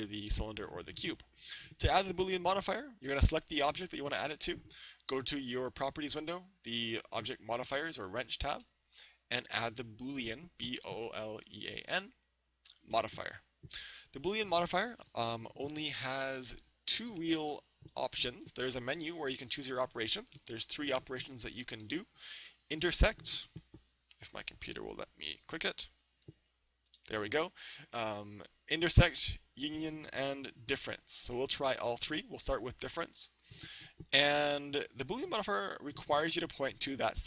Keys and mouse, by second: 8.5-12.2 drag, 26.5-31.3 drag.